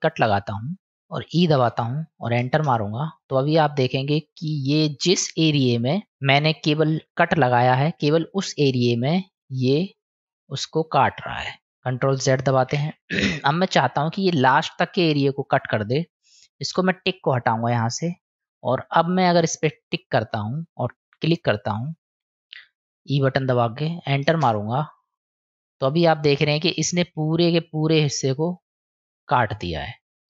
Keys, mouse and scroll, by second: 3.3-11.7 middle drag, 12.5 ctrl+z, 17.0 click, 18.5-24.7 drag, 25.0-30.2 middle drag.